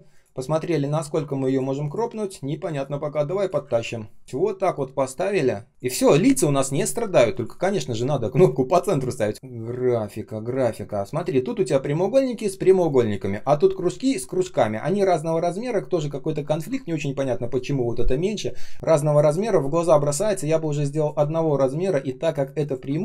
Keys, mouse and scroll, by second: 2.7 shift+click, 3.6 ctrl+z, 3.8 ctrl+scroll up 1, 8.2 alt+h, 9.3 space, 9.5 space, 12.5 space, 13.0 space, 13.1 space, 20.7 space, 21.2 ctrl+scroll up 1, 22.3 ctrl+click, 22.6 ctrl+click.